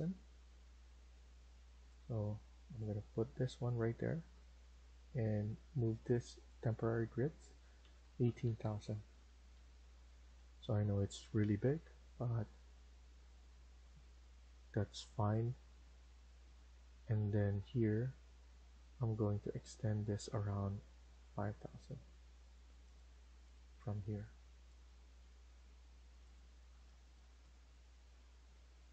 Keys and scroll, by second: 7.4-10.2 typing, 9.0 Return, 9.4 Escape, 14.7 typing, 27.1 typing.